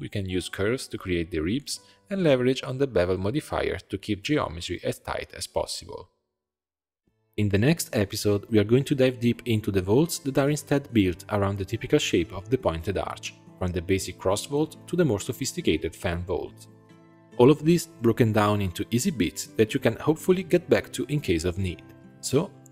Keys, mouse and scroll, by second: 0.0-1.4 shift+drag, 1.7-2.9 middle drag, 2.9-4.4 drag, 5.9-9.2 drag, 9.7 g, 11.8 Tab, 12.0 shift+click, 12.5 ctrl+j, 13.8-15.2 scroll down 2, 15.2 click, 16.6 shift+click, 17.8 alt+click, 18.4 click, 19.3 Tab, 19.8-20.9 middle drag, 20.9-21.5 scroll down 3, 21.5 click, 21.8-22.7 middle drag.